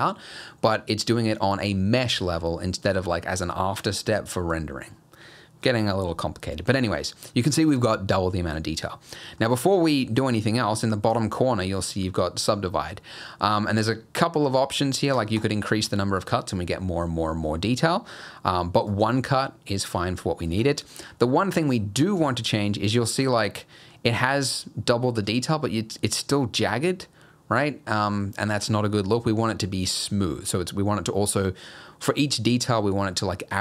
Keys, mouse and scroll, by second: 9.1 middle click, 15.2 click, 15.4 click, 18.5 click, 21.7 middle click, 22.1 scroll up 1, 22.3 shift+middle click, 23.0 middle click, 23.6 middle click.